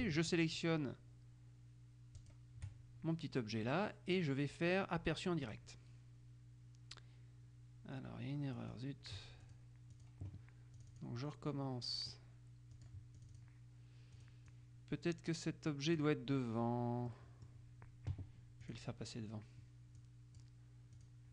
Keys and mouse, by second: 2.3 shift+click, 5.7 click, 8.7 click, 9.6 click, 10.9 click, 12.9-14.1 drag, 14.3 click, 17.3 middle click, 18.8 click, 20.1 click, 21.1 click.